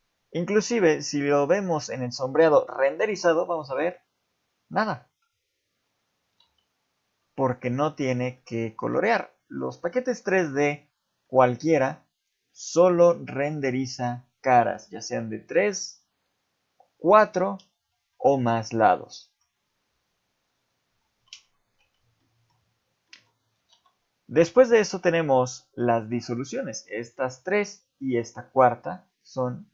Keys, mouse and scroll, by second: 6.5 z, 7.6 ctrl+z, 8.3 middle click, 8.8 z, 9.2 middle click, 9.8-10.3 scroll down 3, 10.1 middle click, 10.9 click, 11.2 middle click, 11.8 click, 12.2 click, 12.5 middle click, 13.2 click, 13.5 middle click, 14.4 click, 14.8 shift+middle click, 18.1 middle click, 18.9 scroll up 2, 19.4-20.0 scroll down 3, 21.3 Tab, 21.8 Tab, 22.2 middle click, 23.1 middle click, 23.7 x.